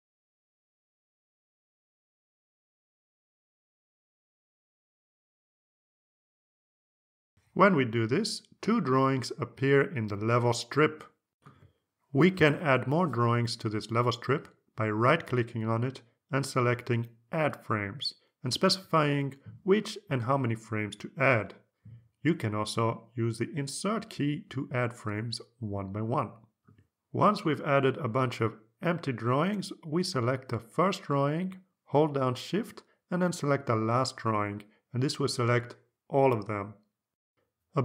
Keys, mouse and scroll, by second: 0.1 click, 0.5 click, 0.8 click, 1.1 click, 1.5 click, 1.8 click, 2.1 click, 2.5 click, 3.2 click, 3.6 click, 4.0 click, 4.4 click, 5.0 click, 5.7 click, 16.1 right click, 17.4 click, 19.6 click, 20.7 click, 21.4 2, 21.7 click, 22.8 click, 24.5 BackSpace, 24.7 2, 24.9 3, 26.4 click, 31.8 click, 33.0-33.5 scroll down 2, 35.0 shift+click.